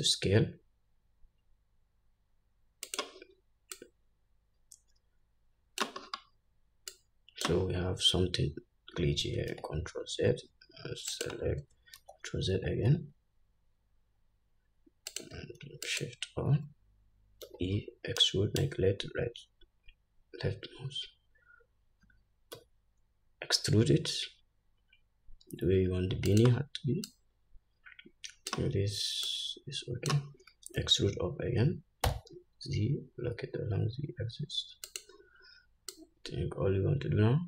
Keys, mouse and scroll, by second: 4.1-11.6 drag, 6.4-7.2 scroll down 2, 8.2-9.7 scroll up 2, 9.9 ctrl+z, 12.4 ctrl+z, 12.9 ctrl+z, 15.5 click, 16.2 alt+shift+click, 17.9 e, 27.4-35.4 drag, 31.1 e, 36.3-37.4 drag.